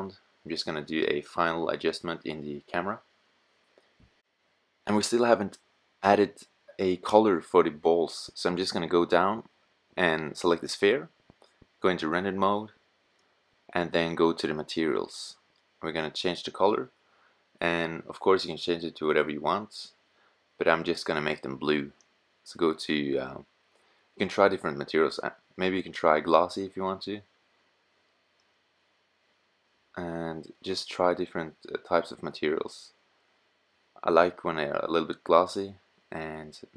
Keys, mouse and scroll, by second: 4.0-5.8 middle drag, 8.8-9.5 middle drag, 9.5 click, 12.4 middle click, 13.1-19.7 middle drag, 19.7-21.1 drag, 24.2-26.8 middle drag, 32.6 middle click, 35.1-36.4 middle drag, 36.5-36.7 middle drag.